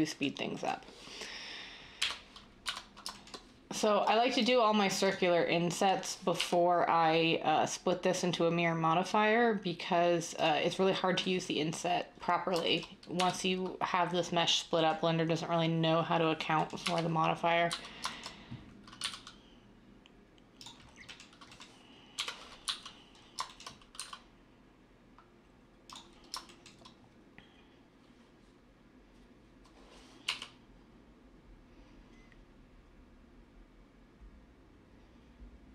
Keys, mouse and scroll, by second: 2.0-2.6 typing, 6.4 i, 13.1 1, 16.8-17.7 typing, 19.0 e, 22.1-23.9 typing, 30.3-35.4 middle drag.